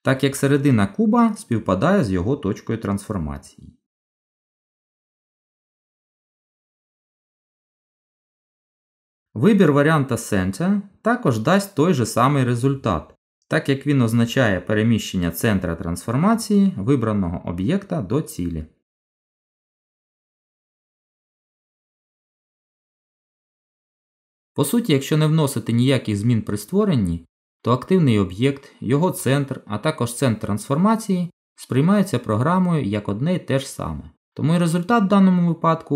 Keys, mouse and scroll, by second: 8.9 click, 17.4 g.